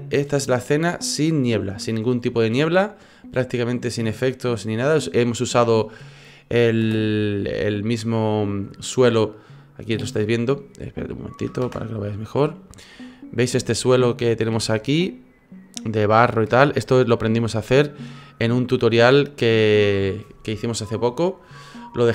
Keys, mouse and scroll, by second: 6.8 space, 11.6 KP_0, 12.2 middle click, 13.7-14.5 shift+scroll up 6, 14.5 shift+middle click, 15.0 middle click, 16.0 middle click, 16.5 shift+middle click, 17.4 middle click, 18.9 middle click.